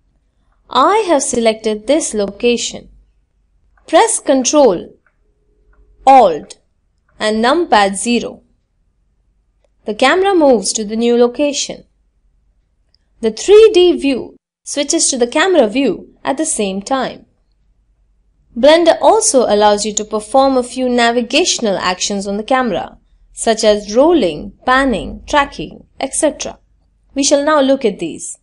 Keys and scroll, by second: 3.6 ctrl+alt+KP_0.